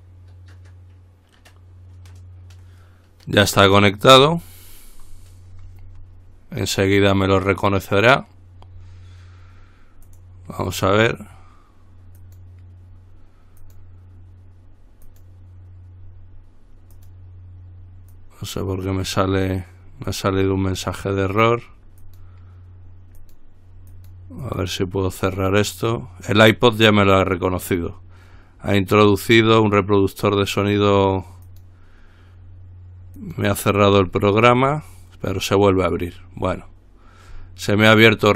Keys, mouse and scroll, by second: 10.3 click, 12.4 click, 13.8 click, 15.2 click, 17.1 click, 18.3 click, 20.3 click, 22.2 click, 23.4 click, 31.7 click, 33.4 click.